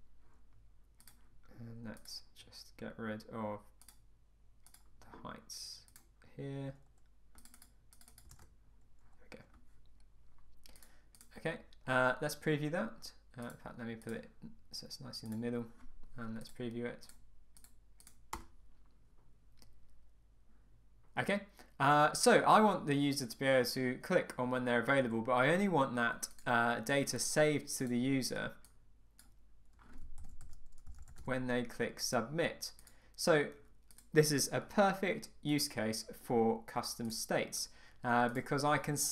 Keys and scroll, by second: 8.3 Return, 18.3 Return.